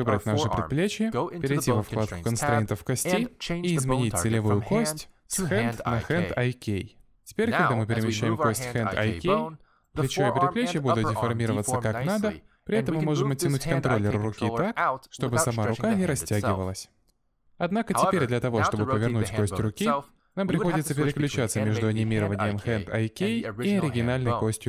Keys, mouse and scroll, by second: 0.0 click, 0.5 middle click, 4.5 click, 8.0 middle click, 8.5 z, 9.1 click, 11.0 middle click, 11.3 g, 13.0 z, 13.5 middle click, 14.0 g, 15.3 middle click, 15.8 g, 17.2 middle click, 17.6 g, 19.6 middle click, 19.9 g, 20.6 middle click, 21.1 g, 21.7 middle click, 22.2 g, 22.9 click, 23.2 middle click, 23.4 scroll down 1, 23.5 middle click, 23.8 r, 24.5 r.